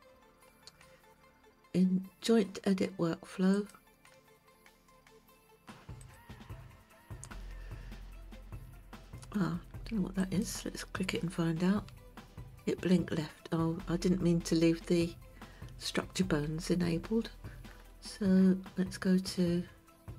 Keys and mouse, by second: 3.5 click, 6.1 click, 10.3 click.